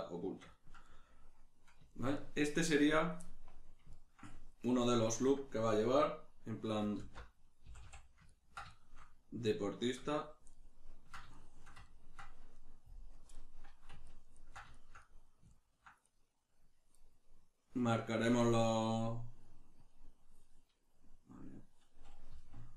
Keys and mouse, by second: 5.0 right click, 7.0 alt+q, 8.3-12.6 ctrl+middle drag, 12.6 right click, 13.2 KP_Decimal, 13.4-16.0 middle drag, 16.0 right click, 18.4-22.3 drag, 22.3 z.